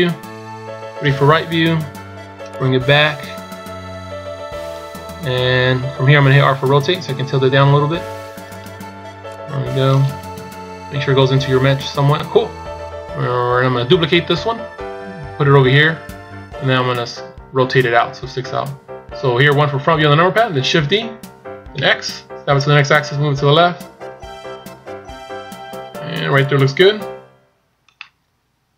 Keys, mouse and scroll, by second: 1.0 KP_3, 2.5 click, 9.3 click, 10.4 KP_1, 11.4 scroll up 1, 12.7 scroll up 1, 16.4-17.3 scroll down 1, 21.0 shift+d, 28.0 middle click.